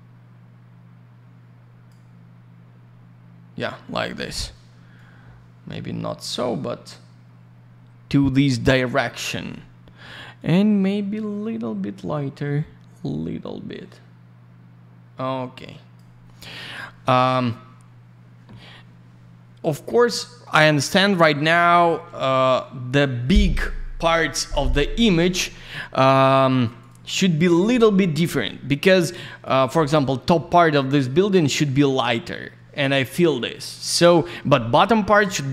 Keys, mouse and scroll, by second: 4.9 click, 10.3 click, 16.5 click, 16.6 click, 19.9 click, 22.3 click, 22.4 click, 26.7 ctrl+click, 26.8 ctrl+click, 29.0 click, 30.7 middle click, 30.9 middle click, 31.5 shift+click.